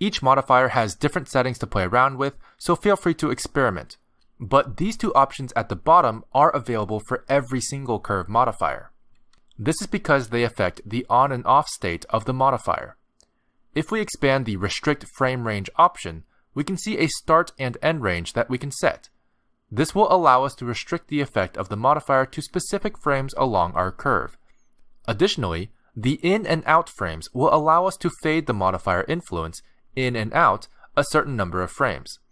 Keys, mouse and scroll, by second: 0.2 click, 16.1 click, 16.7-18.0 scroll down 2, 18.0 scroll down 1, 18.2 click, 27.9 click.